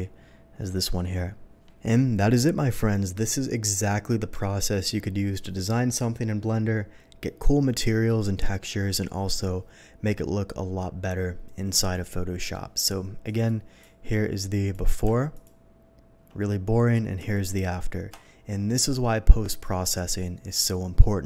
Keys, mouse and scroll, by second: 13.2 click, 13.4 click, 14.4 click, 15.3 alt+click, 17.3 alt+click.